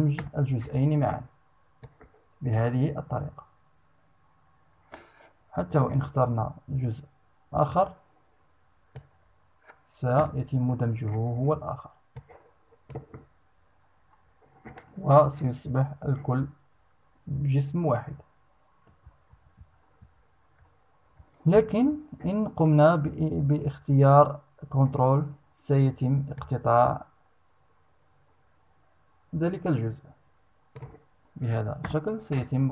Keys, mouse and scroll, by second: 1.4 click, 7.2-8.7 shift+drag, 9.7 Return, 11.6 click, 18.8 ctrl+z, 21.2 ctrl+z, 25.9-30.5 ctrl+drag, 31.4 Return.